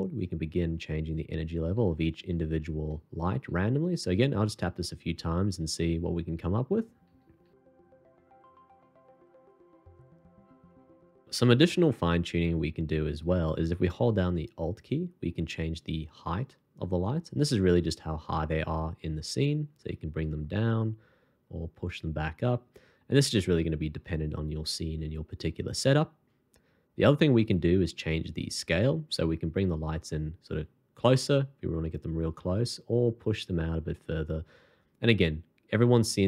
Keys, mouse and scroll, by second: 0.1-10.8 typing.